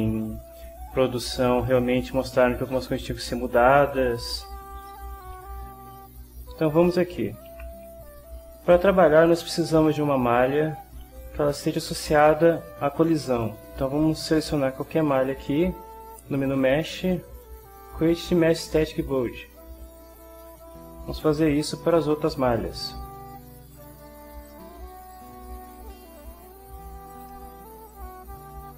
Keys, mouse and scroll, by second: 12.5 click, 16.6 click, 19.8 click, 21.3 click, 23.7 click, 24.4 click, 25.1 click, 26.1 click, 27.1 click, 27.9 click.